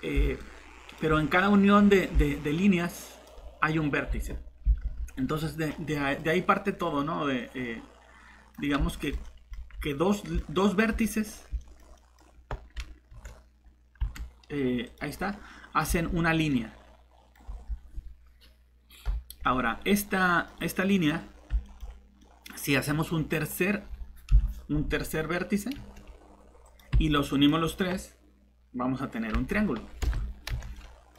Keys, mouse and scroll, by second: 0.7 typing, 1.8 scroll up 1, 2.3 click, 4.1 alt+Tab, 4.8 Tab, 5.7 middle click, 6.3 scroll down 1, 7.4 click, 8.9 middle click, 11.2 scroll up 1, 11.6 middle click, 14.8 click, 15.1 middle click, 15.9 Tab, 21.3 scroll up 1, 21.6 middle click, 26.6 click, 30.0 Escape, 30.7 middle click.